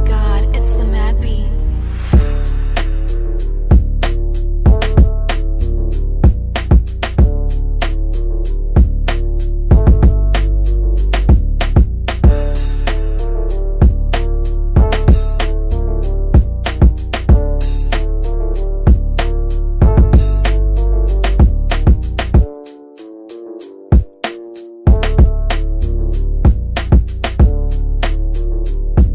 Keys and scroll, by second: 0.8 ctrl+q, 26.2 F4.